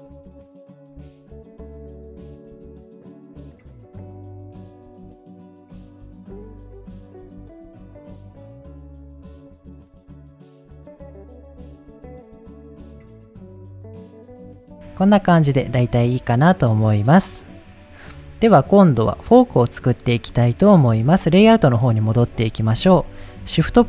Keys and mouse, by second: 1.0 shift+click, 1.4 ctrl+z, 1.8 shift+click, 2.5 ctrl+z, 2.8 shift+click, 3.5 shift+click, 4.1 click, 4.3 click, 4.5 click, 4.7 click, 5.3 click, 5.5 click, 5.9 click, 6.1 click, 6.6 middle click, 7.9 middle click, 8.2 click, 8.5 click, 9.3 middle click, 10.7 middle click, 12.0 click, 13.9 shift+click, 14.6 shift+middle click, 15.5-16.3 middle drag, 22.1 middle click, 22.7 ctrl+s, 23.7 shift+a.